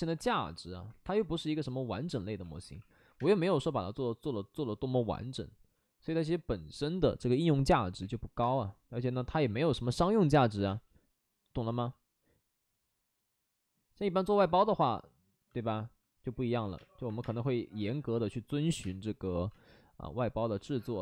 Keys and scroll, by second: 1.0 3, 2.1 alt+s, 2.4-3.1 typing, 7.9 5, 8.4 space, 9.4 ctrl+z, 9.8 space, 10.3 space, 10.4 space, 11.6 ctrl+z, 14.3 ctrl+z, 16.7 space, 17.0 1, 17.1 space, 19.2 space, 19.2 5.